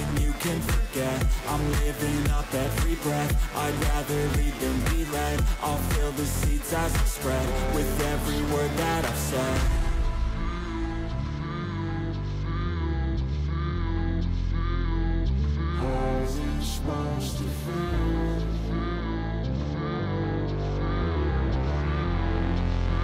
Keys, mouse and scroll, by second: 8.0 double click, 16.3 ctrl+a, 18.1 ctrl+d.